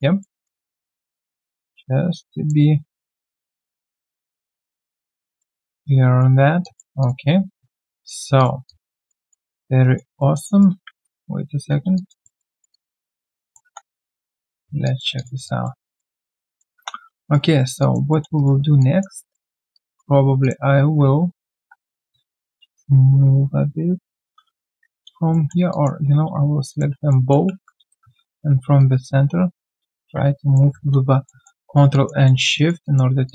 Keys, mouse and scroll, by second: 0.2 alt+middle click, 0.6 alt+right click, 4.4 alt+right click, 4.7 alt+click, 5.0 alt+right click, 5.2 alt+middle click, 5.5 alt+right click, 5.8 right click, 6.3 scroll down 1, 6.6 alt+click, 7.0 alt+click, 7.3-7.6 alt+scroll down 1, 7.6 alt+middle click, 7.9 alt+right click, 8.6 alt+click, 9.0 alt+right click, 9.2 alt+click, 9.5 alt+middle click, 9.8 alt+right click, 10.2 alt+middle click, 10.5 alt+right click, 10.9 ctrl+z, 11.3 ctrl+z, 11.9 alt+click, 12.2 alt+middle click, 12.5 alt+right click, 12.7 alt+click, 13.3 alt+middle click, 14.1 right click, 14.6 scroll down 1, 14.8 alt+click, 15.1 alt+click, 15.8 alt+click, 15.8 alt+middle click, 16.1 alt+click, 16.5 alt+middle click, 16.7 1, 17.0 right click, 17.5 alt+right click, 17.8 alt+click, 18.1 alt+middle click, 18.4 alt+right click, 18.8 alt+click, 19.1 alt+middle click, 19.6 q, 19.7 right click, 21.2-21.7 alt+scroll down 2, 21.5 alt+w, 22.5 ctrl+shift+click, 23.4 ctrl+shift+i, 24.7 ctrl+z, 25.3 alt+middle click, 25.7 alt+click, 26.7 shift+click, 27.1 alt+middle click, 27.5 alt+middle click, 28.8 ctrl+shift+click, 31.2 alt+middle click, 31.6 alt+right click, 31.9 alt+click, 32.2 alt+middle click, 32.5 alt+right click, 32.8 alt+click.